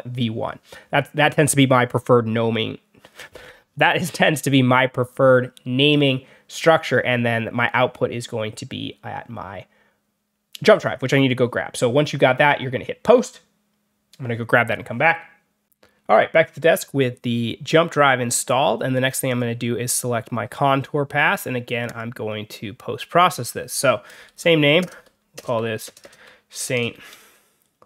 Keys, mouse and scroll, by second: 15.6 click, 19.2 click, 19.8 click, 21.8 click, 23.9-27.8 typing.